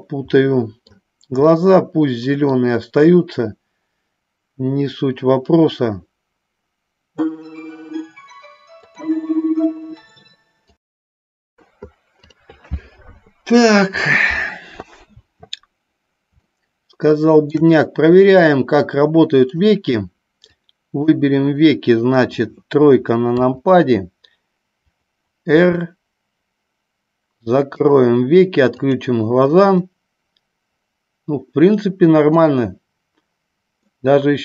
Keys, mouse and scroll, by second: 0.8 middle click, 1.9-3.0 middle drag, 16.6 shift+middle click, 18.5-19.6 middle drag, 20.7 click, 23.3 KP_3, 25.8 r, 28.9 click, 29.9-32.4 middle drag, 33.9-34.4 middle drag.